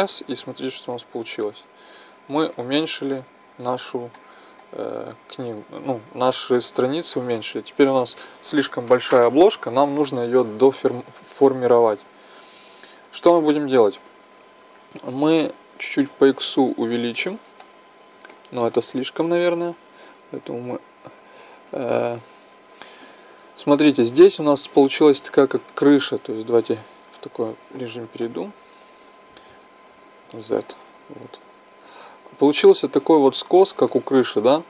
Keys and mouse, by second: 1.5-9.2 middle drag, 15.8-17.6 drag, 17.6 middle click, 19.0-21.7 middle drag, 26.8 KP_1, 30.2 z, 31.2-33.4 middle drag, 33.9 click.